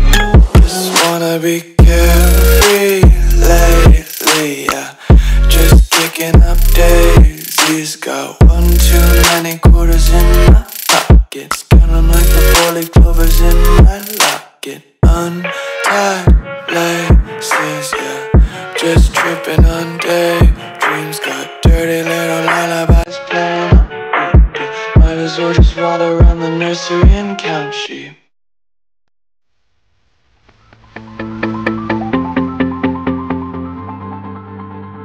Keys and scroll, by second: 0.1 alt+super+space, 0.6 alt+super+space, 1.2 alt+super+space, 2.1 super+space, 2.2 super+space, 2.3 super+space, 2.3 super+space, 2.5 super+space, 2.6 super+space, 3.1 super+space, 3.5 super+space, 4.0 super+space, 6.5 space, 7.0 alt+super+space, 7.1 alt+super+space, 7.2 alt+super+space, 7.3 alt+super+space, 7.8 alt+super+space, 8.4 alt+super+space, 9.0 alt+super+space, 10.0-10.4 typing, 11.5-13.2 typing, 13.7 super+space, 13.8 super+space, 14.7 a, 19.9 space, 20.4 alt+super+space, 20.5 alt+super+space, 20.6 alt+super+space, 20.7 alt+super+space, 20.8 alt+super+space, 21.3 v, 22.5 space, 23.0 alt+super+space, 23.8-29.7 typing, 29.8 Tab, 31.2 Tab, 31.8-32.3 typing, 33.3 Right, 34.4 Right, 34.9 space.